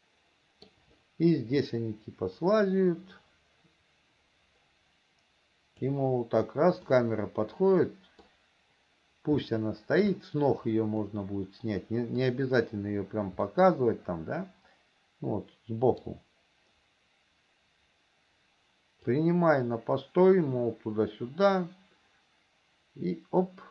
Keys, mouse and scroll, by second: 2.1-6.4 drag, 7.2-8.8 middle drag, 9.7 shift+middle click, 11.3-12.7 middle drag, 13.8-16.5 middle drag, 19.5-23.7 drag.